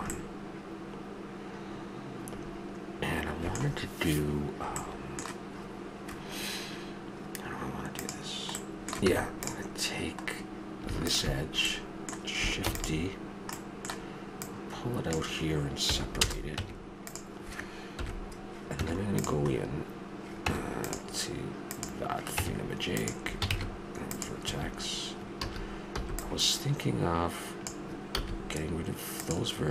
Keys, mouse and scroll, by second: 0.1-2.1 middle drag, 4.7-5.1 middle drag, 6.4-8.0 middle drag, 8.0-8.6 drag, 8.6-9.8 middle drag, 9.0 Tab, 11.1 click, 11.2-12.5 middle drag, 12.7 shift+d, 14.4-15.9 drag, 15.9 p, 16.5 Tab, 17.9 KP_1, 18.8 Tab, 20.4 Tab, 21.7-22.4 right drag, 22.4 Tab, 23.5 ctrl+Tab, 24.4 a, 25.4 a, 26.0 b, 28.1 x.